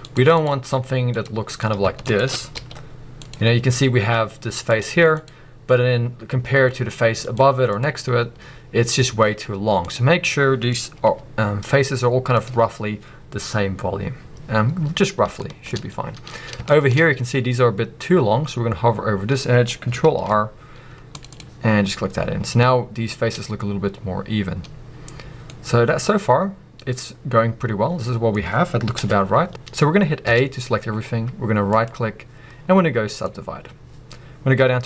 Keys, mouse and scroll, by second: 0.1-0.7 drag, 2.0 shift+click, 3.3 click, 12.4-13.8 drag, 13.8-15.4 scroll down 2, 15.4 shift+middle click, 15.8-16.3 scroll up 2, 16.3-16.7 scroll up 1, 16.7 shift+middle click, 20.1 ctrl+r, 21.4 click, 21.8-24.6 scroll down 2, 25.4 middle click, 28.9 KP_1, 29.5-30.2 scroll up 1, 31.7-34.8 right drag.